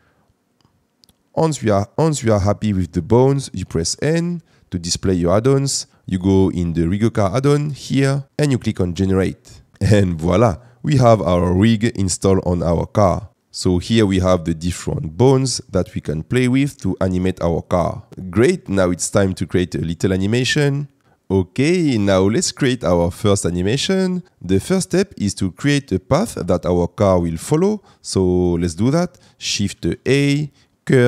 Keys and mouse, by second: 3.8 n, 7.9 click, 13.1 g, 13.3 Escape, 14.2 g, 16.7 Escape, 18.1 middle drag, 29.7 shift+a.